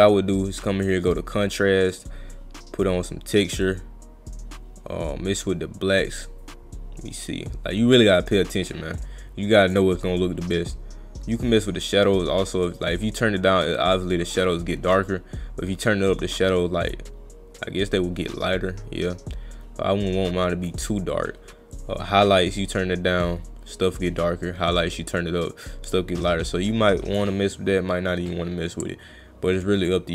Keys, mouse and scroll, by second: 2.3 click, 3.7-5.4 drag, 6.0-9.7 drag, 10.4-10.8 drag, 13.8 drag, 19.5 click, 21.7-27.2 drag, 28.3-29.9 drag.